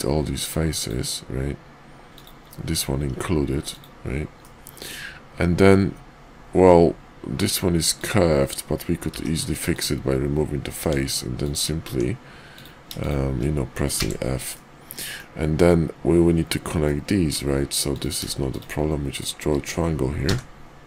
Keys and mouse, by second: 2.0 click, 3.0 x, 4.4-7.5 middle drag, 7.9 click, 9.1 x, 10.8 Tab, 11.3 click, 11.8 Tab, 13.9 f, 14.5 middle click, 16.8 middle click, 17.8 click, 18.4 shift+click, 20.2 f.